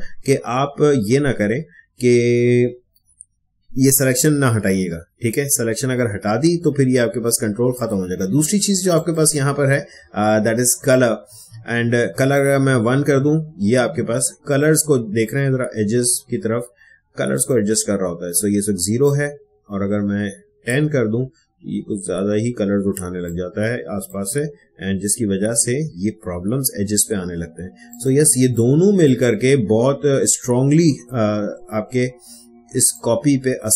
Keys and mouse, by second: 7.7-13.7 drag, 13.7 space, 14.2-23.0 ctrl+drag, 23.0 ctrl+space, 23.2 ctrl+click, 23.4 ctrl+space, 27.8-31.4 drag, 32.9-33.7 drag.